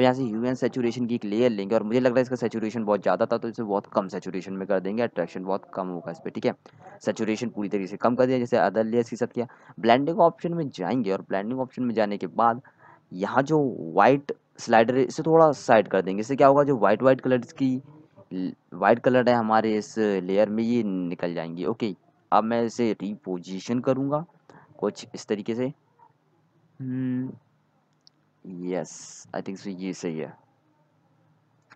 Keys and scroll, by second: 27.6 ctrl+z.